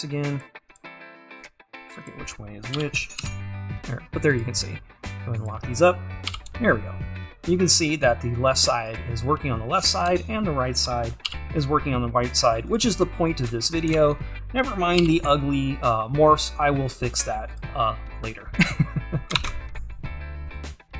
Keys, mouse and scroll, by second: 0.4-2.9 drag, 2.9 g, 5.2-6.4 drag, 6.4 g, 10.1 `, 11.4 g, 14.4-15.0 scroll up 2, 15.0-17.6 scroll up 1, 17.6 g, 18.2-19.4 scroll down 2, 19.4-20.0 scroll down 1, 20.0 ctrl+Tab.